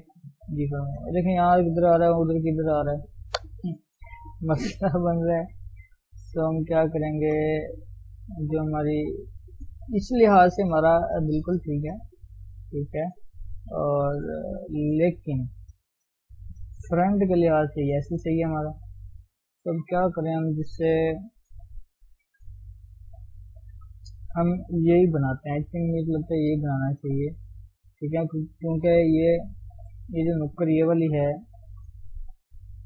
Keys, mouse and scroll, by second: 0.2 g, 1.3-4.6 scroll down 1, 4.6 ctrl+z, 6.5 ctrl+z, 7.2 shift+middle click, 7.8 Tab, 8.0-9.1 scroll up 1, 9.1-12.0 scroll up 1, 12.4 shift+z, 13.1 shift+z, 13.6 shift+z, 15.0 shift+z, 16.0-16.4 scroll down 1, 16.4 KP_3, 18.9 shift+z, 21.5 shift+z, 22.7 shift+z, 23.2 shift+z, 25.8 KP_1, 26.8 shift+z, 29.5-29.8 scroll up 1, 29.8-31.3 shift+middle drag, 31.3-32.5 drag, 32.5 KP_3.